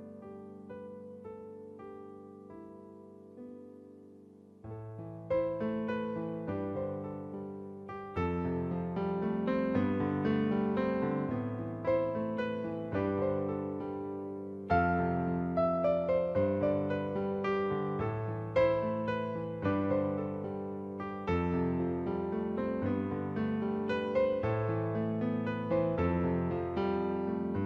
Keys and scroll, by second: 0.0-1.6 typing, 6.2-7.8 typing, 11.7 ctrl+alt+z, 17.2-17.6 typing, 19.7 ], 23.5 [.